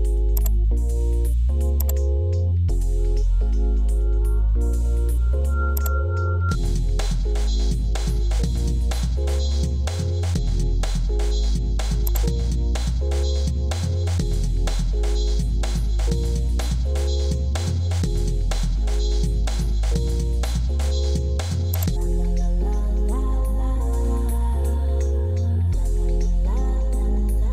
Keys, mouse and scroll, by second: 20.2 Escape, 23.1 alt+e, 26.9 alt+n.